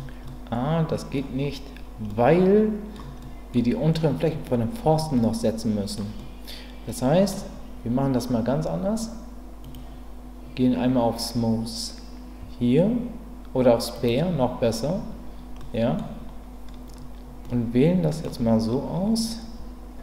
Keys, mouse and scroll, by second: 0.2 middle click, 2.1 middle click, 3.2-6.0 middle drag, 6.2-7.3 middle drag, 9.8-15.0 drag, 15.6 middle click, 17.4 middle click.